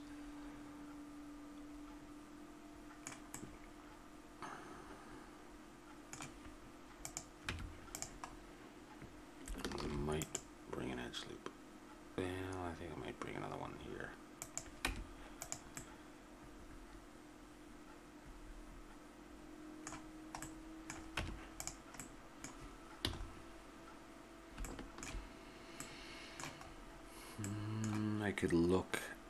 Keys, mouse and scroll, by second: 3.3 middle click, 4.2-6.1 middle drag, 7.0 right click, 7.4 Tab, 8.4 middle click, 9.8 ctrl+r, 14.9 Tab, 15.8 middle click, 17.7-20.4 middle drag, 21.2 Tab, 23.0 a, 24.2 middle click, 26.7-27.8 middle drag.